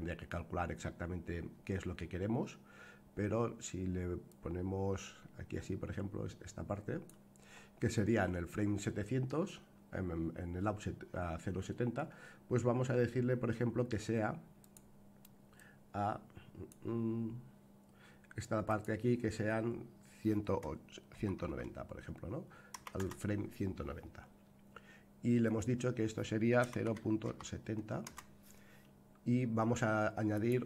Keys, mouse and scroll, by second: 4.2-7.1 drag, 14.6 click, 15.5-16.7 drag, 18.6-23.8 drag, 25.4-28.7 drag, 30.3-30.6 right drag.